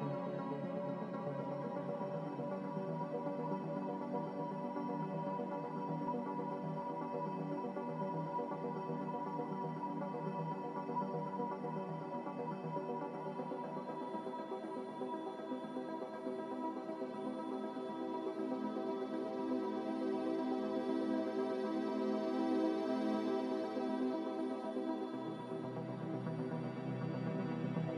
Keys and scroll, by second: 15.5 Return, 21.8 z, 26.0 ctrl+z, 26.3 ctrl+z.